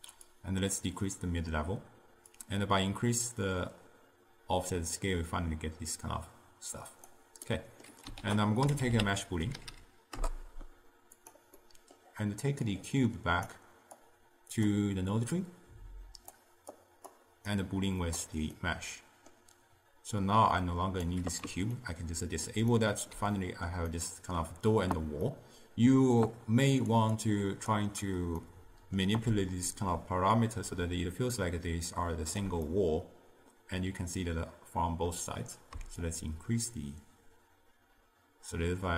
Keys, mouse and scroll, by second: 0.4-5.5 drag, 7.6 middle click, 8.3 ctrl+a, 9.8 o, 11.7-12.7 middle drag, 12.7 click, 14.1-16.9 drag, 17.6 click, 18.6-20.3 middle drag, 20.3 drag, 21.8-26.9 ctrl+middle drag, 26.9 click, 27.2-28.5 drag, 28.5 middle click, 30.5-32.8 shift+drag, 32.8-35.8 middle drag, 36.1-38.9 shift+drag.